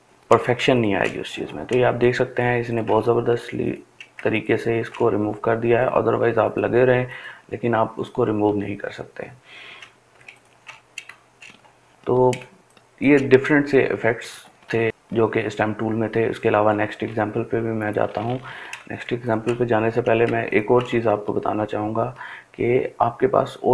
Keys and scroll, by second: 0.9 ctrl+space, 1.4 ctrl+space, 1.5 ctrl+space, 17.0 ctrl+space, 17.5 ctrl+space.